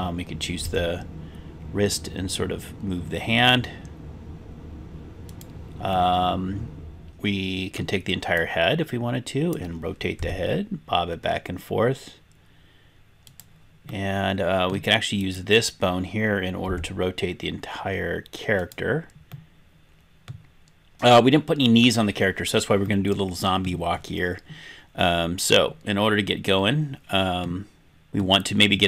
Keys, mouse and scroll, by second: 0.7 r, 5.4 click, 5.4 right click, 5.8-7.9 middle drag, 8.4-9.6 drag, 10.2 r, 13.4 click, 13.4 right click, 13.8-14.8 middle drag, 15.2 click, 16.6 r, 18.6 click, 18.6 right click, 19.3-20.4 middle drag, 22.2 scroll down 1, 22.8 middle click, 24.4-25.5 scroll up 1, 25.5-27.5 middle drag, 27.9 scroll down 1, 28.1 middle click.